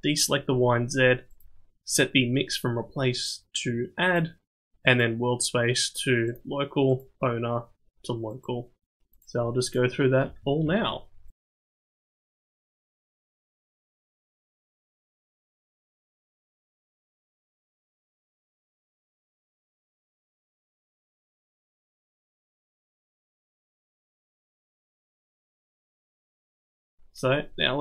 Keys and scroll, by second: 10.1 ctrl+shift+c, 13.3 ctrl+shift+c, 16.2 ctrl+shift+c, 18.6 ctrl+shift+c, 21.4 ctrl+shift+c, 24.2 ctrl+shift+c.